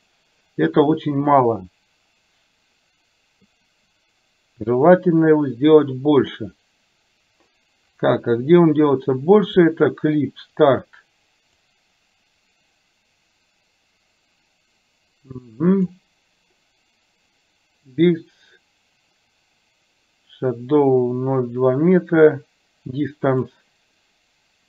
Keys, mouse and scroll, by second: 1.1-3.6 drag, 11.7-15.9 drag, 23.5 drag.